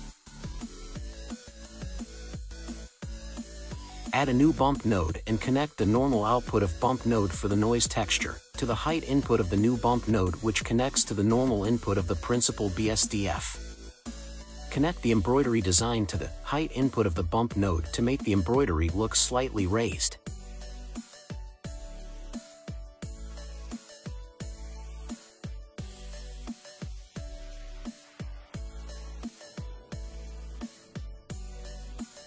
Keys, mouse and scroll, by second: 0.4 click, 1.6 middle click, 2.0-3.3 scroll up 6, 3.3 click, 4.6 shift+d, 7.8 click, 8.5 click, 9.0-12.1 middle drag, 13.3 drag, 17.7 click, 20.8 click, 22.1-22.9 drag, 23.8-24.4 scroll down 2, 24.4-24.8 scroll up 2, 25.3-26.6 shift+middle drag, 26.6-27.2 scroll down 1, 27.2-29.0 middle drag, 29.0 click.